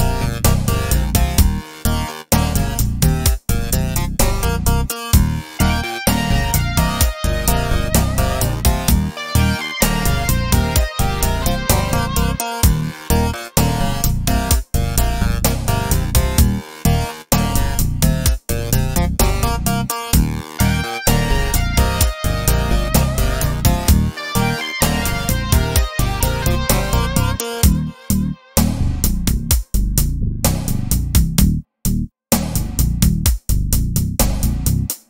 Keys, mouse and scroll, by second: 7.1 i, 9.7 right click, 10.9-20.0 drag, 17.8 s, 20.0 right click, 20.7 s, 22.4 click, 23.1 g, 25.4 click, 29.4 i, 31.5-35.0 drag.